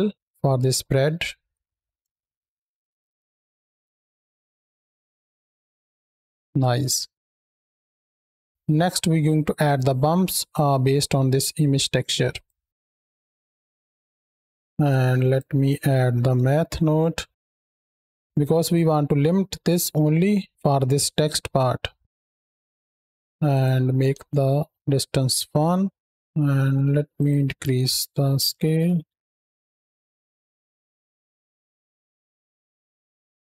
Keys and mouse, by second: 0.1 middle click, 0.6 space, 2.9-3.6 middle drag, 4.8-5.1 middle drag, 6.4 space, 6.7 middle click, 7.1 middle click, 7.6 click, 10.3-12.3 drag, 13.4 Down, 13.9 Down, 13.9 drag, 14.1 click, 14.7-15.2 drag, 17.6 Down, 22.4-23.1 drag, 23.3-24.7 drag, 27.0-28.6 shift+drag, 29.3 shift+click, 31.0-31.8 middle drag, 32.1 middle click, 32.3 middle drag, 32.5 middle click, 32.8 middle click, 33.3 space.